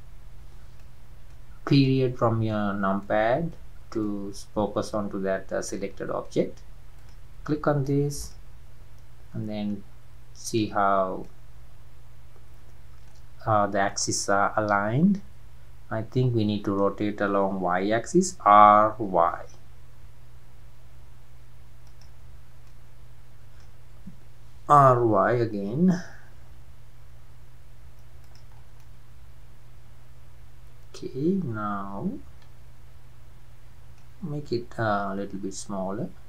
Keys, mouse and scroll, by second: 0.3 scroll up 2, 0.8-1.5 middle drag, 1.5 scroll down 2, 1.9-2.7 middle drag, 2.7-3.0 scroll down 2, 3.0-3.8 middle drag, 3.8 scroll down 2, 4.1-7.0 middle drag, 7.0 drag, 7.5-7.9 middle drag, 7.9-8.2 scroll up 1, 8.2 drag, 10.4 click, 11.0 scroll down 2, 11.2-13.4 middle drag, 13.4-13.8 scroll up 1, 13.9-16.9 middle drag, 18.4 r, 22.7-24.7 middle drag, 24.7 r, 28.5-28.8 scroll down 4, 28.8-31.8 middle drag, 35.0 s.